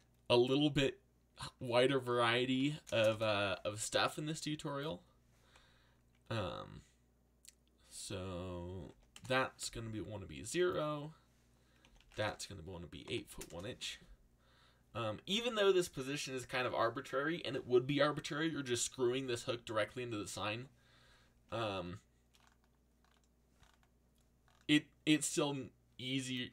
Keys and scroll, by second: 1.9-3.4 typing, 8.9 0, 9.1 Return, 11.6-13.2 typing, 13.5 Return.